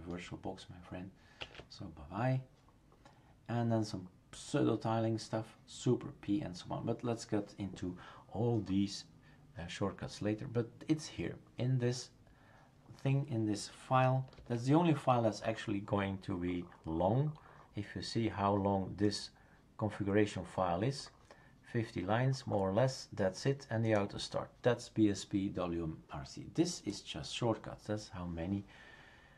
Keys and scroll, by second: 1.4 shift+super+q, 14.3 super+f.